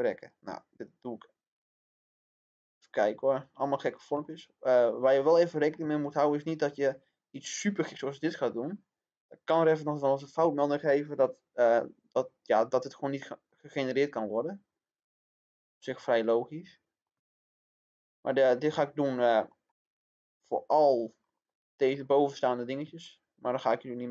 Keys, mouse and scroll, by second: 4.2-5.9 shift+middle drag, 6.8-15.9 drag, 15.9 middle click, 17.7 click, 18.7 middle click, 20.4 click, 21.1-21.5 scroll down 1, 21.5 middle click, 23.9 scroll up 1.